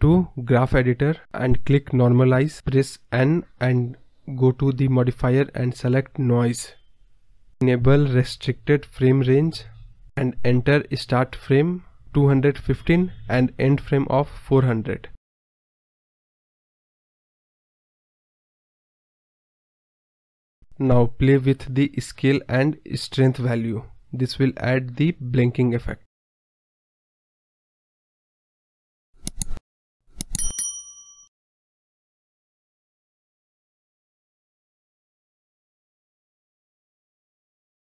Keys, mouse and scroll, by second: 5.0 click, 6.1 click, 7.2-7.6 scroll up 5, 10.2-11.4 drag, 13.0 click, 16.0-17.6 drag, 17.6 KP_0, 21.7-23.5 drag, 24.0-25.1 drag, 25.5 space, 26.7 space, 27.6 click, 29.0-30.4 drag, 31.3 click, 31.6 space, 32.4 click, 33.4 space, 33.7 space, 34.5 space, 34.7 click, 35.2-36.4 drag, 36.4 space, 36.7 click.